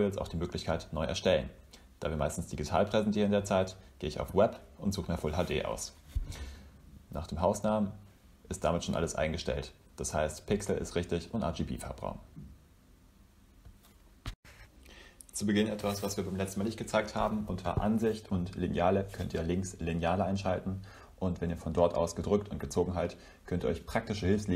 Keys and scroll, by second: 5.9-7.0 typing.